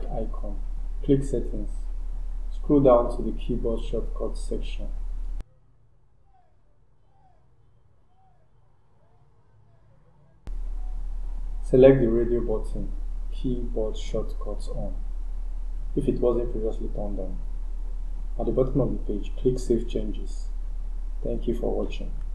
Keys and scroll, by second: 6.7 scroll down 1, 13.9 scroll down 1.